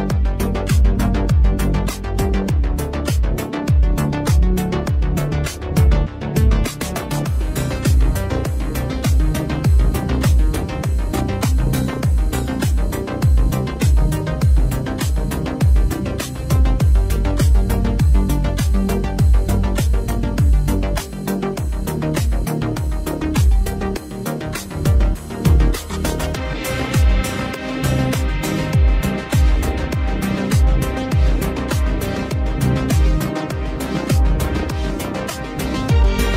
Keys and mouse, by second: 0.4 ctrl+z, 1.1 ctrl+z, 1.3 ctrl+z, 1.9 ctrl+z, 2.8 ctrl+z, 3.0 right click, 3.2 ctrl+z, 4.3 ctrl+z, 4.8 ctrl+z, 4.9 ctrl+z, 5.2 ctrl+z, 5.6 ctrl+z, 5.8 ctrl+z, 9.4 ctrl+z, 10.2 right click, 15.3 ctrl+z, 17.9 ctrl+z, 18.7 ctrl+z, 18.9 ctrl+z, 22.0 ctrl+z, 22.2 ctrl+z, 22.4 ctrl+z, 22.7 ctrl+z, 22.8 ctrl+z, 23.1 ctrl+z, 23.4 ctrl+z, 23.6 ctrl+z, 23.9 ctrl+z, 24.5 ctrl+z, 26.0 ctrl+z, 26.5 ctrl+z, 27.9 ctrl+z, 28.8 ctrl+z, 29.1 ctrl+z, 29.4 ctrl+z, 29.5 ctrl+z, 35.7 right click, 36.2 ctrl+z.